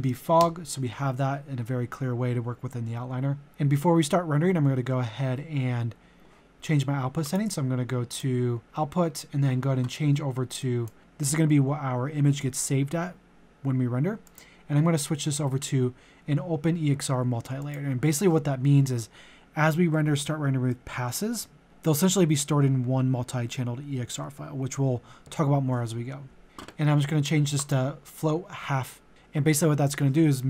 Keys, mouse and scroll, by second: 0.4 Return, 7.3 click, 8.7-10.6 scroll down 1, 10.6 click.